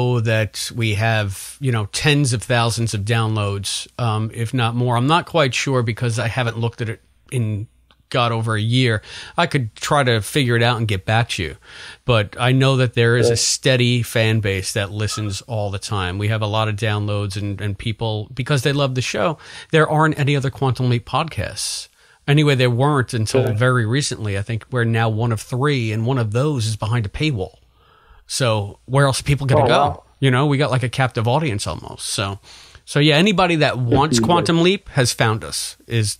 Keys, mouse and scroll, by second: 2.7-14.2 drag, 18.7-23.5 drag, 25.0-26.1 drag, 30.9-36.1 drag.